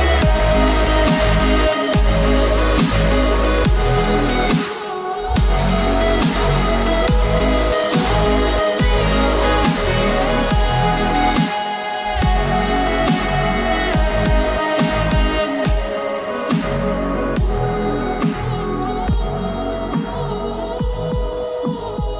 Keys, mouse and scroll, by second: 6.6 click, 8.0 scroll up 1, 8.5 ctrl+c, 8.7 ctrl+v, 9.9 click, 12.2 click, 17.2 right click, 17.8 click, 19.7 scroll down 1, 20.4 click.